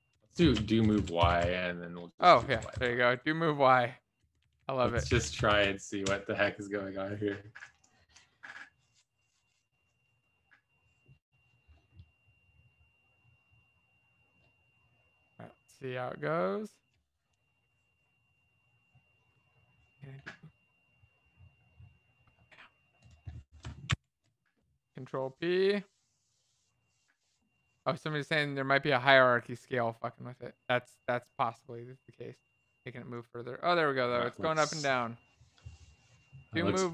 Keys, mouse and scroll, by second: 1.1 ctrl+space, 1.1 Down, 1.1 Return, 1.3 Right.